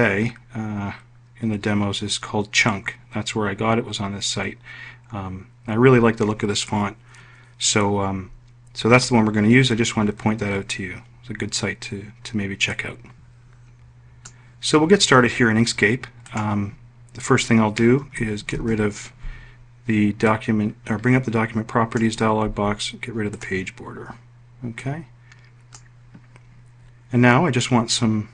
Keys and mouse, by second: 18.4 d.